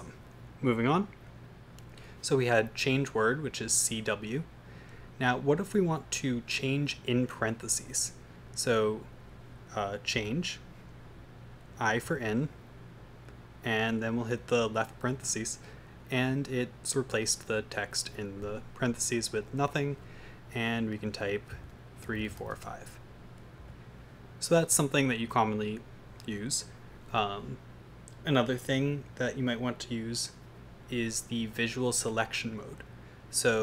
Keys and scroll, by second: 5.1 Right, 5.7 Right, 5.7 Right, 8.9 Right, 10.2 typing, 12.0 typing, 15.0-15.7 typing, 21.3-23.0 typing, 25.5 Escape, 28.8 Page_Up, 32.5 Down.